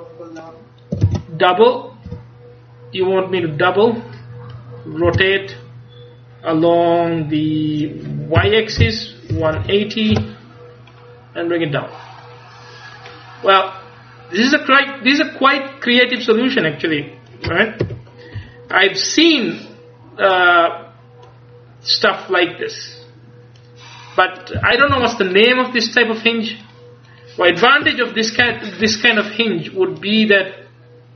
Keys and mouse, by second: 1.1 shift+d, 5.2 r, 12.3-13.4 drag, 13.6-15.0 drag, 17.9 KP_1, 18.4 KP_3, 22.6 click, 24.7 a, 25.0 ctrl+s, 26.7 click, 27.9 KP_1, 28.5 ctrl+KP_1, 30.1-31.1 drag.